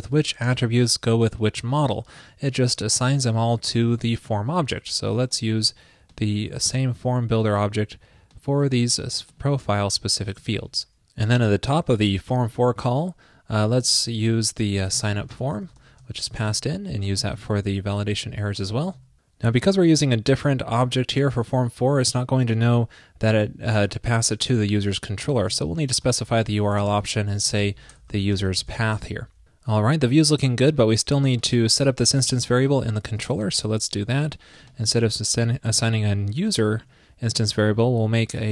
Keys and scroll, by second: 2.7 super+[, 16.2 alt+shift+Left, 16.4 super+c, 17.6 super+v, 28.8 super+s, 32.6 super+c, 34.7 alt+super+Down, 35.1 super+v.